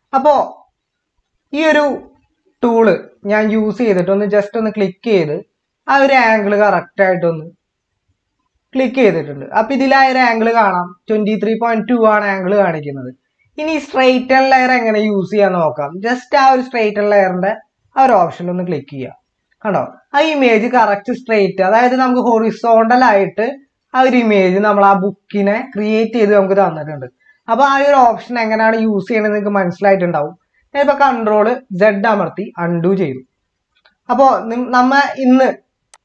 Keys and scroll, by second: 31.6 ctrl+z.